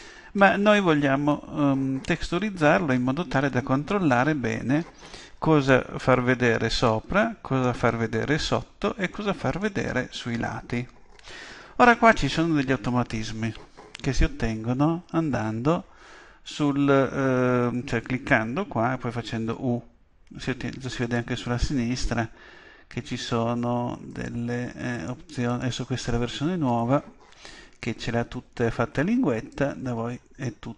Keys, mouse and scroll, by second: 0.3-1.3 scroll up 1, 3.5-5.4 middle drag, 7.2-9.0 middle drag, 9.1-11.0 middle drag, 21.0-22.7 drag, 24.1-27.3 drag, 29.5-30.7 drag.